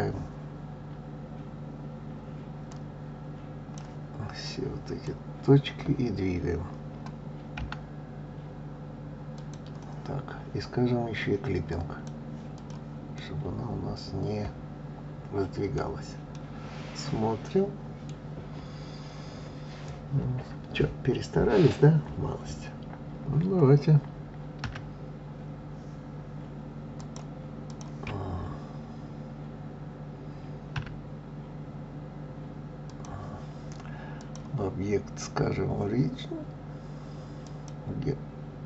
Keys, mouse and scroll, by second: 2.7-4.5 drag, 11.7 click, 12.5 click, 13.1-15.8 middle drag, 15.8-16.3 scroll down 4, 16.3-19.3 middle drag, 27.0-29.9 drag, 34.2-37.2 drag.